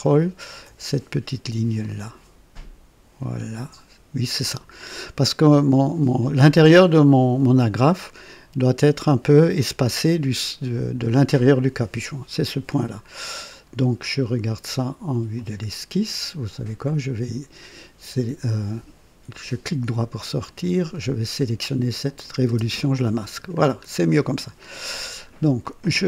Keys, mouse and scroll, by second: 1.8 click, 15.3 click, 16.8 click, 19.3 right click, 20.4 click, 22.0 click, 22.4 space, 23.6-23.9 scroll down 2, 24.3-24.9 right drag, 25.1 scroll down 1, 25.6-26.0 right drag.